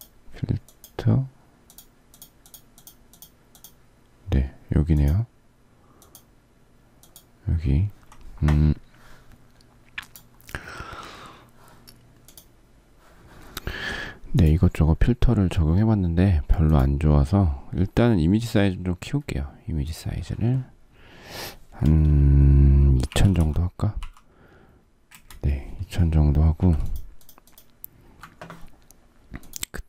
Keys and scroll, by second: 22.9-24.0 typing, 25.1 Return, 26.7 alt+z.